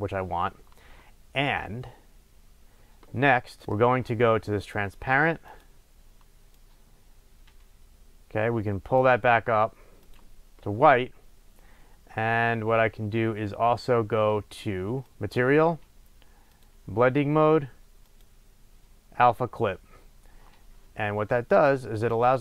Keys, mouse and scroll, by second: 0.0-3.6 drag, 3.6-4.7 middle drag, 4.1-4.7 scroll up 2, 4.7 click, 5.5 drag, 10.0 click, 15.0 click, 16.6-22.4 drag.